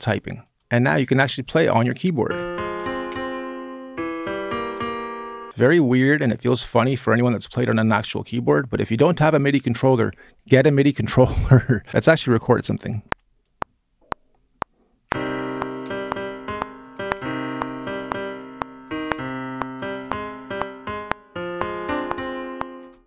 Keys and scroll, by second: 1.8-6.0 typing, 11.6-12.8 typing, 14.6-23.0 typing.